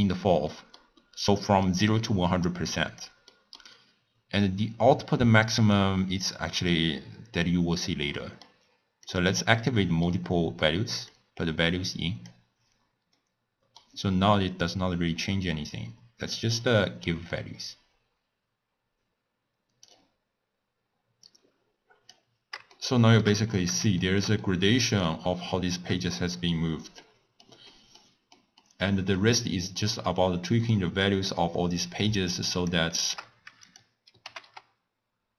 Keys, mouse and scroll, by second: 0.5-2.6 middle drag, 2.6 click, 3.3-6.2 middle drag, 6.2-8.2 drag, 8.2-9.4 middle drag, 9.4 click, 9.5-11.1 middle drag, 11.1-13.2 drag, 13.2-14.6 middle drag, 14.6-15.2 scroll up 1, 15.2-18.4 drag, 21.2-22.7 drag, 22.7 shift+middle click, 23.4 scroll down 1, 23.5-24.0 scroll up 1, 24.0-25.2 shift+middle drag, 25.2-25.7 scroll down 1, 25.7-31.0 middle drag, 31.0 click, 32.0 click, 32.9 shift+middle click, 33.6 click, 34.2 g.